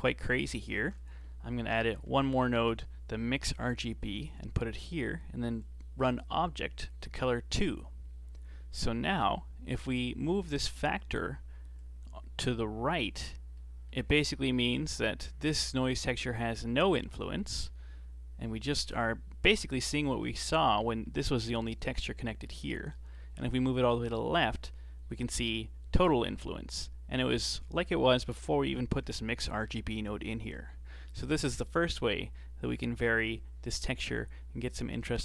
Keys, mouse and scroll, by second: 0.8 shift+a, 5.6 click, 10.5-13.5 drag, 15.9-17.2 drag, 17.2-17.5 scroll down 2, 17.5-19.9 middle drag, 19.9 click, 21.4-23.5 drag, 23.5-24.5 middle drag, 24.5-25.7 drag, 25.7-26.8 middle drag, 26.8 click, 28.9-31.0 middle drag, 31.1-34.1 drag.